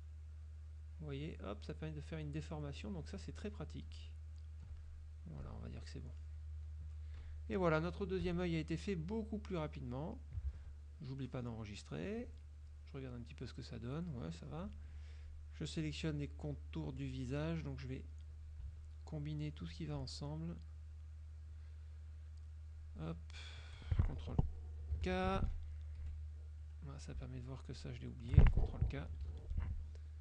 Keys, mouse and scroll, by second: 3.9-5.2 alt+drag, 5.5 click, 6.9 click, 7.3 KP_Subtract, 8.3 KP_Subtract, 9.7 click, 10.6 ctrl+s, 10.9-12.2 ctrl+drag, 13.2 click, 14.0 click, 14.9 F2, 15.3 click, 17.0 F1, 18.9-19.5 shift+drag, 19.8-20.5 shift+drag, 21.3 shift+click, 22.3 shift+click, 22.9 shift+click, 26.1 F2, 27.9 shift+click.